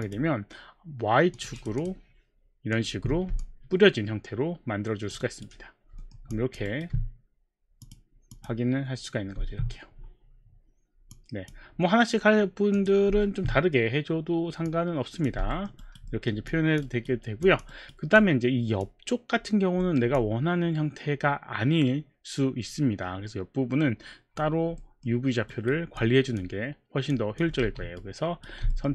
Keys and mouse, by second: 0.0 click, 1.3 click, 1.6 click, 1.8 click, 2.8 click, 4.2 alt+click, 5.2 alt+right click, 6.0 alt+middle click, 6.3 alt+click, 6.9 alt+right click, 7.8 click, 8.3 click, 11.1 click, 12.7 click, 14.7 click, 15.6 alt+middle click, 15.8 alt+right click, 16.5 alt+click, 16.9 alt+right click, 17.4 alt+click, 17.7 alt+right click, 18.2 alt+click, 19.8 alt+middle click, 20.2 alt+click, 24.8 alt+middle click, 25.5 alt+right click, 26.0 alt+click, 26.5 alt+click, 27.2 alt+click, 27.9 right click, 27.9 alt+click, 27.9 q, 28.7 alt+middle click.